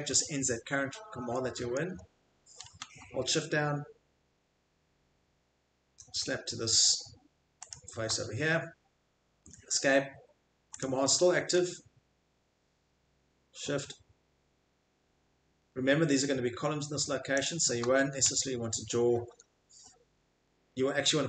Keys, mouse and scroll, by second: 1.8-2.6 scroll, 7.7 shift+click, 9.4 Escape, 10.8 click, 11.5 middle click, 11.7 middle click, 11.8 middle click, 17.4 shift+click, 18.4 scroll, 19.3 Escape, 19.3 scroll, 20.2-20.7 scroll.